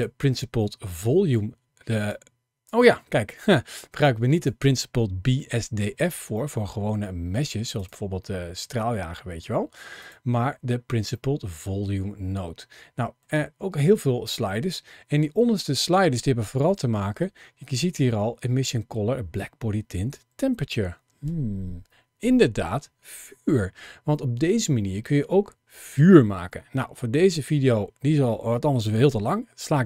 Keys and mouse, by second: 2.0 click, 3.1 click, 4.0 click, 6.1-6.7 middle drag, 7.6 click, 9.8 click, 10.9-13.1 middle drag.